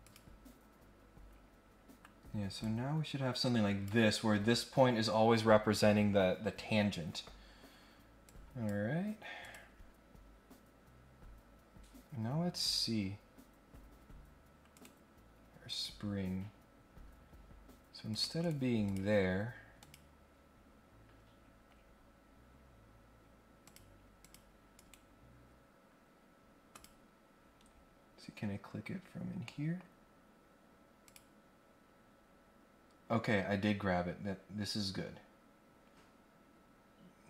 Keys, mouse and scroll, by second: 0.0 click, 0.8 scroll down 1, 1.2-1.8 scroll up 2, 2.6-3.8 drag, 7.5 scroll down 1, 8.2 click, 9.4 click, 12.2 scroll up 1, 14.7 right click, 15.7 click, 17.3-17.6 scroll down 1, 18.1 click, 18.4 right click, 18.8 click, 19.7 click, 20.5 scroll down 1, 21.4-21.8 scroll down 1, 23.6 click, 24.2 click, 24.7 right click, 26.7 click, 27.1 scroll down 1, 27.3-27.8 scroll up 2, 29.4-29.7 scroll down 1, 31.0 click, 33.4-34.0 scroll down 2, 34.5-35.0 scroll up 2.